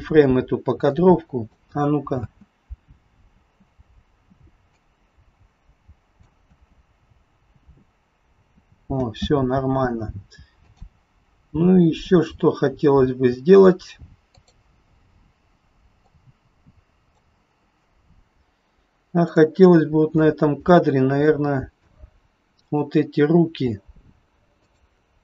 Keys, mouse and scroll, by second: 0.9 click, 2.1 space, 3.4 space, 4.8 click, 6.3 space, 9.1 space, 10.7 click, 14.3 click, 16.2 click, 19.3 click, 19.7 scroll up 4, 20.0 shift+middle click, 20.8-21.2 scroll up 1, 21.2 middle click, 22.6 click, 24.6 shift+click.